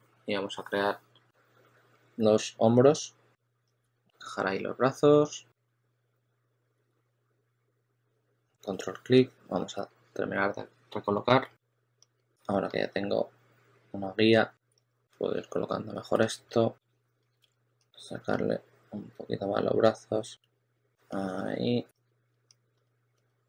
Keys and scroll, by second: 1.2 w, 3.5 q, 3.8 w, 5.0 q, 7.0 w, 8.0 q, 8.3 w, 9.4-12.6 typing, 16.1 s, 17.3 super+z, 20.4 s, 22.6-23.4 typing.